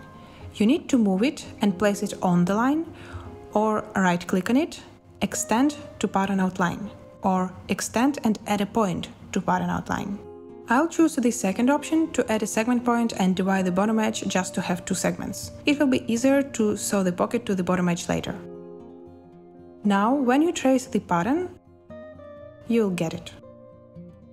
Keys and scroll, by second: 2.7 Escape, 18.8 i.